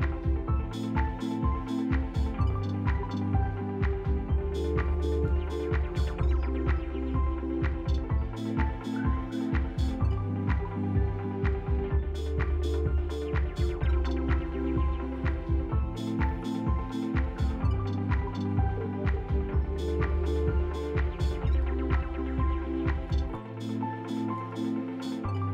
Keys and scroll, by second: 4.7 alt+x, 5.6 s, 8.2 s, 9.3 s, 10.2 s, 11.9 s, 12.6 s, 13.7 s, 14.7 z, 16.9 s, 17.7 f, 20.1 z, 21.1-22.2 typing, 25.4 s.